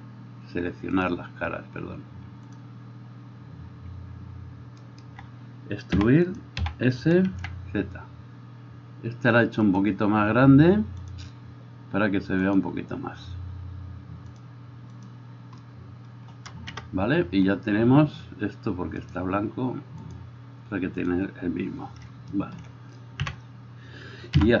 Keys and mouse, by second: 1.2-6.7 drag, 5.0 alt+middle click, 5.0 alt+right click, 6.1 e, 6.7-24.6 middle drag, 6.8 s, 11.2 click, 12.6-19.3 drag, 16.9 KP_0, 23.4 n.